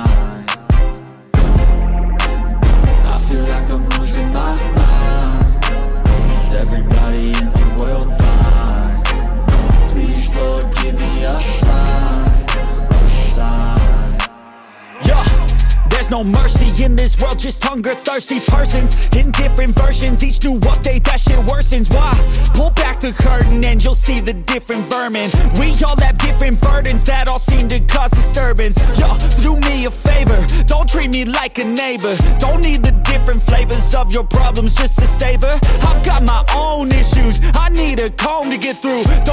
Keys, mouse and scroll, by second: 0.2 click, 0.3 scroll down 1, 0.5 space, 0.9 click, 1.1 c, 1.5 click, 1.7 ctrl+z, 2.2 click, 2.3 scroll down 1, 2.4 shift+middle click, 2.6 scroll up 1, 3.3 click, 3.4 scroll down 1, 3.4 shift+middle click, 3.5 scroll up 1, 4.2 click, 4.3 scroll down 1, 4.4 shift+middle click, 4.4 scroll up 1, 5.1 click, 5.2 space, 5.3 middle click, 5.5-5.9 scroll up 2, 5.6 shift+middle click, 5.9 middle click, 6.0 c, 6.1 click, 6.4 shift+middle click, 6.4 m, 6.5 click, 6.6 middle click, 6.8 click, 7.3 middle click, 8.1 shift+scroll down 2, 8.3 scroll up 2, 8.4 click, 8.7 m, 8.8 scroll down 1, 8.9 shift+middle click, 8.9 scroll up 1, 9.0 middle click, 9.1 scroll down 1, 9.3 scroll up 1, 9.4 middle click, 9.6 Tab, 9.7 middle click, 10.0 middle click, 10.0 scroll down 1, 10.4 click, 10.5 scroll down 1, 10.6 shift+middle click, 10.6 scroll up 1, 11.0 click, 11.2 Tab, 11.4 click, 11.7 Tab, 11.9 shift+middle click, 11.9 scroll up 1, 12.5 shift+middle click, 13.1 scroll up 2, 13.2 middle click, 13.5 ctrl+middle click, 13.6 ctrl+r, 13.8 ctrl+click, 14.1 click, 14.2 scroll down 1, 14.3 click, 14.5 middle click, 14.6 click, 15.0 scroll up 1, 15.1 click, 15.2 middle click, 16.3 click, 16.4 Tab, 16.6 middle click, 16.6 scroll up 2, 16.9 ctrl+r, 17.0 ctrl+click, 17.2 Tab, 17.4 ctrl+r, 17.4 click, 17.6 scroll down 1, 17.6 2, 17.7 shift+middle click, 18.2 2, 18.3 alt+click, 18.6 ctrl+x, 18.6 scroll down 1, 18.8 scroll up 1, 18.8 ctrl+r, 19.0 scroll down 1, 19.0 shift+middle click, 19.1 scroll up 1, 19.2 shift+middle click, 19.4 click, 19.5 shift+click, 19.7 g, 20.3 ctrl+click, 20.4 click, 20.4 scroll down 1, 20.8 middle click, 21.2 shift+middle click, 21.6 typing, 22.3 ctrl+click, 22.3 middle click, 22.5 shift+middle click, 22.6 click, 22.7 middle click, 22.8 scroll up 1, 23.0 g, 23.2 click, 23.4 middle click, 23.6 Tab, 23.7 middle click, 23.9 Tab, 23.9 middle click, 24.2 Tab, 24.4 click, 24.4 shift+middle click, 24.6 Tab, 24.8 shift+middle click, 24.8-25.2 scroll down 2, 24.9 click, 25.6 scroll up 1, 25.6 g, 25.8 g, 26.0 shift+click, 26.1 Tab, 26.2 click, 26.3 middle click, 26.4 Tab, 26.4 1, 26.6 middle click, 26.9 scroll up 1, 27.0 g, 27.2 click, 27.4 middle click, 27.6 scroll up 1, 27.7 ctrl+shift+click, 27.8 shift+middle click, 28.1 ctrl+shift+click, 28.2 shift+middle click, 28.4 g, 28.8 ctrl+click, 28.9 ctrl+r, 29.0 ctrl+click, 29.7-30.0 scroll down 2, 29.8 middle click, 30.0 middle click, 30.5 click, 30.6 shift+middle click, 30.7 Tab, 30.8 middle click, 31.0 Tab, 31.1 scroll up 1, 31.3 click, 31.4 middle click, 31.7 click, 32.1 middle click, 32.6 ctrl+r, 32.6 middle click, 32.7 1, 32.8 click, 32.9 click, 33.1 ctrl+z, 33.2 click, 33.4 m, 33.5 click, 34.0 2, 34.4 click, 34.6 shift+middle click, 34.8 ctrl+click, 35.3 Tab, 35.4 scroll down 1, 35.5 middle click, 35.6 Tab, 36.0 click, 36.1 scroll down 1, 36.3 shift+middle click, 36.5 Tab, 36.6 shift+scroll up 1, 36.7-39.3 typing, 37.4 click, 37.5 right click, 37.9 click, 37.9 right click, 38.1 click, 38.4 click, 38.5 shift+middle click, 38.6 scroll up 1, 38.9 click.